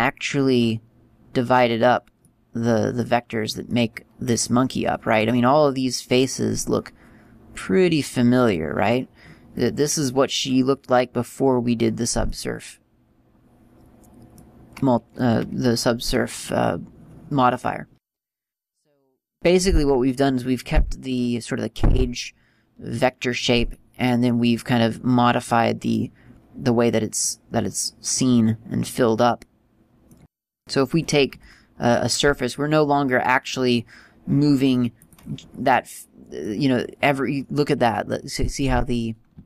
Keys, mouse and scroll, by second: 2.4 middle click, 11.3 scroll down 2, 12.5 middle click, 14.9 middle click, 19.3 middle click, 23.9 middle click, 27.5 middle click, 30.7 right click, 31.5 g, 35.9 middle click, 37.3 middle click, 39.0-39.3 scroll up 4.